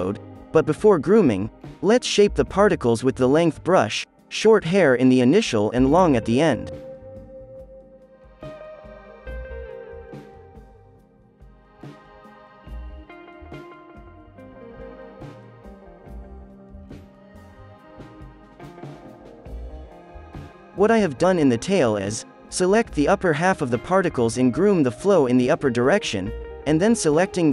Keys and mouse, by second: 0.4-3.9 drag, 1.2 f, 1.8 f, 5.4-8.3 middle drag, 6.3 f, 6.8-9.2 drag, 10.4-11.8 middle drag, 10.6 f, 10.9-16.9 drag, 11.2 right click, 11.4 right click, 11.8-14.6 right drag, 12.2 f, 13.1 f, 16.4 right click, 16.7 f, 16.9 middle click, 17.1-18.8 drag, 17.1 right click, 18.1-21.0 middle drag, 18.6 f, 19.2 KP_3, 19.9 f, 20.1 click, 20.1 right click, 21.2-22.9 middle drag, 21.4 f, 22.4-26.3 right drag, 22.8 ctrl+z, 27.3 KP_3.